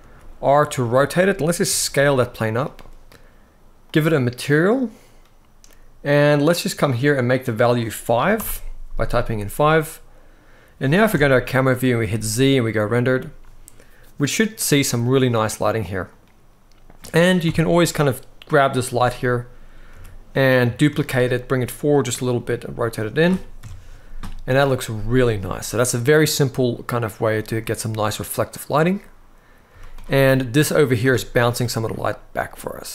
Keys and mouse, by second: 1.0-1.3 middle drag, 1.4 s, 2.2 click, 3.6 click, 10.8 KP_0, 11.8 z, 17.2 KP_7, 19.6 g, 20.6 shift+d, 22.1 r, 22.7-23.3 drag, 23.3 KP_0, 29.4 z, 30.8 click.